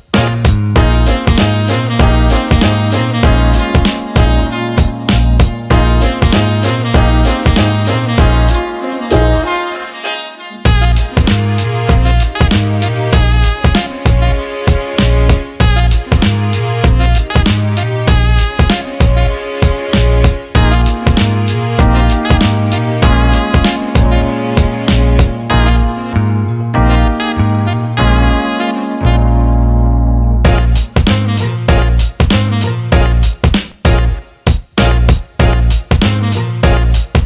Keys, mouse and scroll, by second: 1.1 ctrl+z, 1.7 alt+middle click, 3.7-5.3 drag, 5.4 Tab, 6.9 click, 8.2 Tab, 8.7 click, 9.6 l, 10.0 x, 11.8 Tab, 12.9 click, 14.2 middle click, 14.5 alt+shift+middle click, 15.4 click, 16.1 alt+middle click, 16.9 click, 18.3 click, 19.0 alt+middle click, 19.9-21.2 drag, 21.4 alt+middle click, 22.5-28.4 drag, 28.7 alt+middle click, 30.9 alt+shift+middle click, 31.9 click, 32.9 alt+shift+middle click, 33.8 click, 36.9-37.2 drag.